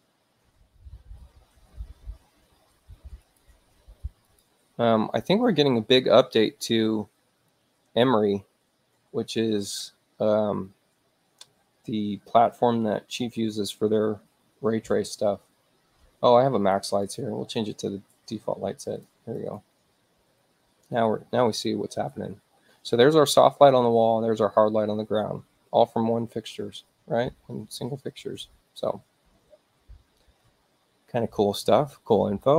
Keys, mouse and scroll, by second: 3.3 click, 4.3 click, 17.0 click, 18.8 click, 19.4 click.